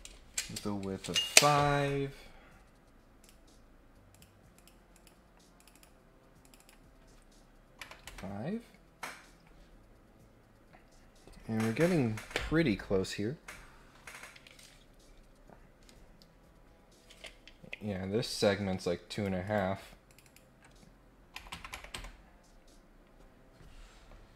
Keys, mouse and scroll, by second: 3.2 click, 4.1 click, 4.5 click, 4.9 click, 5.5 click, 6.4 click, 6.5 click, 9.8-10.1 scroll down 4, 10.3-10.8 scroll up 4, 19.1 click, 19.4 click, 20.0 click, 20.2 click.